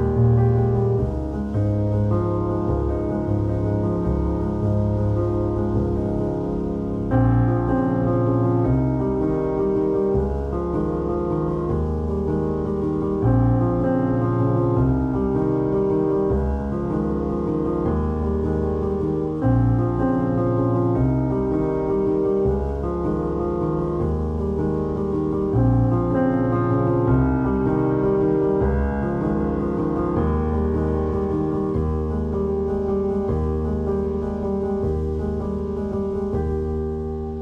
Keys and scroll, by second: 0.5 Tab, 0.8 alt+shift+z, 2.1 Tab, 5.0 Tab, 7.8 1, 8.8 0, 12.2 Tab, 13.2 shift+q, 14.6-16.5 typing, 15.8 alt+z, 16.8 Tab, 19.4 Tab, 20.2 alt+shift+z, 23.9 `, 23.9 s, 27.3 shift+a, 29.3 Escape, 30.3 `, 30.3 s.